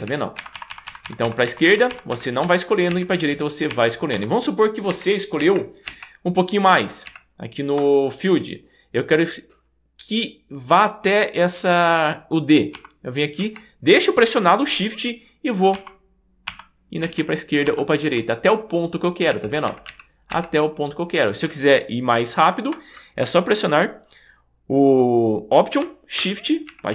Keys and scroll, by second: 0.4 alt+shift+Left, 2.9 alt+shift+Right, 3.7 alt+shift+Left, 4.9 alt+shift+Right, 7.1 alt+shift+Right, 12.8 shift+Left, 13.4 shift+Right, 15.8 shift+Left, 17.0 shift+Right, 17.7 shift+Left, 18.1 shift+Right, 19.3 shift+Right, 26.7 alt+shift+Right.